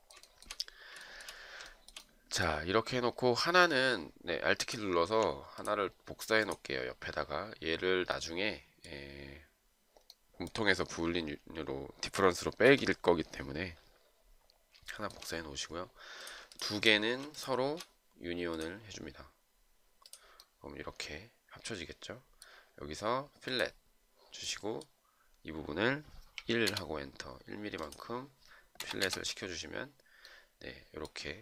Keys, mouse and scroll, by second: 0.6 shift+right click, 1.3 shift+right click, 2.0 shift+right click, 3.9 alt+click, 12.7 shift+right click, 15.2 shift+right click, 16.8 shift+click, 16.9 shift+double click, 17.7 shift+click, 26.7 1, 26.7 Return, 28.8 Return, 29.2 Return.